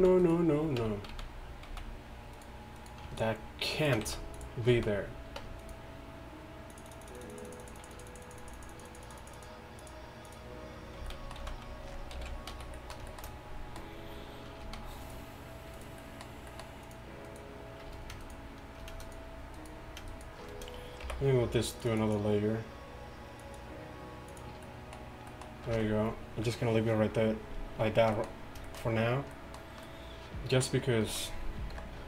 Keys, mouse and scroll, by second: 0.0 z, 0.9 Tab, 1.7 z, 4.1 x, 4.8 z, 5.5 Tab, 11.1 z, 11.5 z, 12.3 alt+h, 12.6 a, 14.7 z, 21.1 m, 22.2 click, 25.8 z, 29.5-30.3 middle drag, 31.8 KP_5.